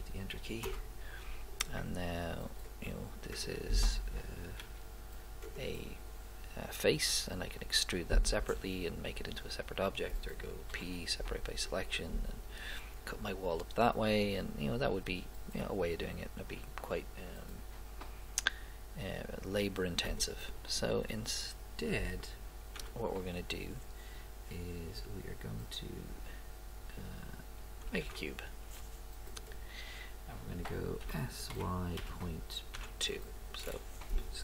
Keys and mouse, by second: 2.6-4.1 drag, 3.4 right click, 4.6 g, 10.9 p, 15.8 click, 16.8 click, 22.8 x, 28.0 shift+a, 31.0 s.